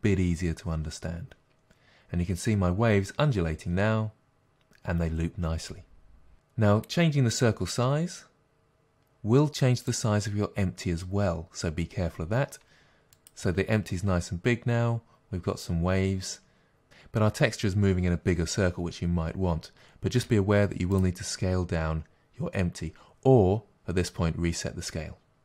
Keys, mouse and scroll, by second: 6.3 click, 7.9 s, 9.9 click, 13.2 click, 13.5 space, 15.8-21.0 drag, 20.9 space.